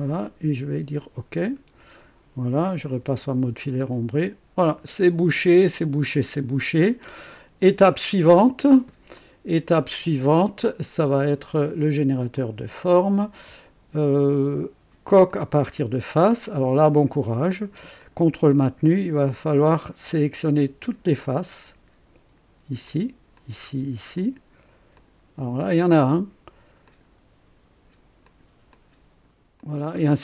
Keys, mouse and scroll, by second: 1.3 click, 2.9 &, 3.7-5.6 drag, 6.0 click, 7.3 right click, 8.3 click, 9.1 click, 12.3 click, 12.6 typing, 15.2 click, 16.0 scroll up 1, 16.4-16.9 right drag, 17.9 ctrl+click, 18.8 ctrl+click, 19.6 typing, 19.7 ctrl+click, 21.3 ctrl+click, 22.8 ctrl+click, 23.3 ctrl+click, 24.1 ctrl+click, 24.9 ctrl+click, 25.1 typing, 25.9 ctrl+click, 26.8 ctrl+click, 28.2 ctrl+click, 28.7-29.4 ctrl+drag, 29.5 ctrl+click.